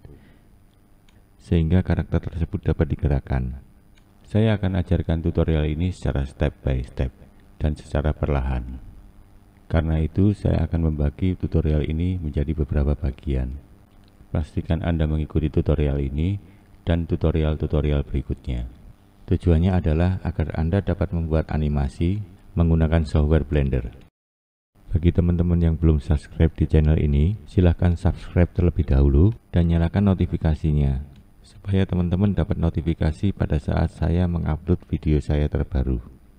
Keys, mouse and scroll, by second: 0.6-1.1 scroll down 1, 1.1 scroll up 1, 1.3 click, 2.6 2, 2.7 shift+Left, 2.9 shift+Left, 3.0 shift+Left, 3.2 shift+Left, 3.3 shift+Left, 3.5 e, 3.9 s, 4.7 1, 4.8 Left, 4.9 Left, 5.2 click, 5.3 click, 5.5 click, 5.6 click, 5.8 click, 5.9 click, 6.1 click, 6.1 click, 6.4 click, 6.5 click, 6.7 click, 6.9 click, 7.1 click, 7.3 scroll up 3, 7.6 scroll down 2, 8.3 click, 8.7 click, 9.6-10.0 scroll down 1, 10.0 click, 10.1 click, 10.6 click, 10.9-11.3 scroll up 2, 11.3 shift+click, 11.7 m, 11.8 scroll down 2, 11.9 click, 12.4-12.8 scroll down 3, 12.8 scroll up 1, 13.0 click, 13.1 click, 13.4 click, 13.9 click, 14.2 click, 14.2 click, 14.9 click, 15.0 click, 15.3 click, 15.4 click, 15.5 click, 15.6 Left, 16.2 Left, 16.5 Left, 16.6 Left, 17.2 Left, 17.3 Left, 17.6 click, 17.9 scroll up 1, 18.0 click, 18.1 scroll down 5, 18.4-19.6 scroll up 7, 18.6 click, 18.7 click, 19.0 click, 19.6-20.1 scroll down 2, 20.8 click, 21.8 m, 21.9 click, 22.2 click, 22.3 click, 22.7 scroll up 1, 22.8-23.3 scroll down 2, 23.3 click, 23.4 click, 23.5 scroll up 1, 23.6 click, 23.7 click, 23.9 Left, 24.0 Left, 24.3 Left, 24.3 Left, 24.5-25.1 scroll down 1, 25.1 Left, 25.5 2, 25.6 Left, 26.0 shift+click, 26.1 shift+click, 26.3 shift+click, 26.4 shift+Left, 26.5 shift+Left, 26.7 e, 27.0 s, 27.5-27.8 scroll up 1, 27.8 1, 27.9 click, 28.2 click, 28.6 scroll down 1, 28.7 click, 28.9 click, 29.5 click, 29.6 click, 29.8 click, 29.9 click, 30.0 click, 30.2 click, 30.4 scroll up 1, 30.6 click, 30.8 scroll down 2, 30.9 scroll up 2, 31.0 click, 31.2 click, 31.4 click, 31.4 click, 31.7 Left, 31.7 Left, 32.0 click, 32.0 Left, 32.2 Left, 32.3 Left, 32.5 Left, 32.6 Left, 32.8 Left, 32.9 Left, 33.1 Left, 33.2-33.7 Left, 33.9 click, 34.1 click, 34.2 click, 34.4 scroll up 1, 34.5 click, 34.6 click, 34.9 click, 35.0 click, 35.5 click, 35.7 click, 36.1 scroll down 2, 36.3 click, 36.3 click.